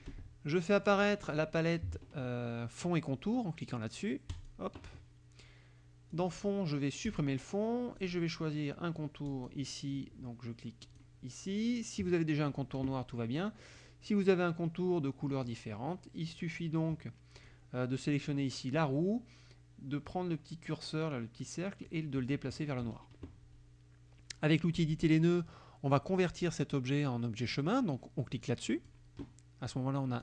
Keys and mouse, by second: 0.8 click, 4.3 click, 6.1 click, 7.0 click, 8.0 click, 9.3 click, 10.9 click, 13.8-16.5 drag, 17.4 click, 18.0 click, 21.9 click, 24.8 click, 28.5 click.